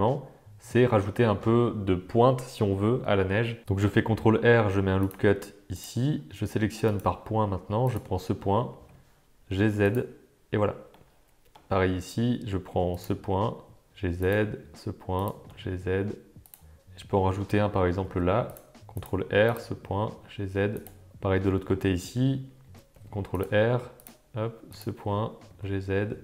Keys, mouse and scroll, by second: 3.8 ctrl+r, 6.9 click, 7.9 click, 8.7 g, 10.9 middle click, 12.9 click, 13.9 g, 15.4 g, 18.0 ctrl+r, 19.4 click, 20.1 g, 21.2 Tab, 21.5 middle click, 22.9 ctrl+r, 24.7 click, 25.5 g.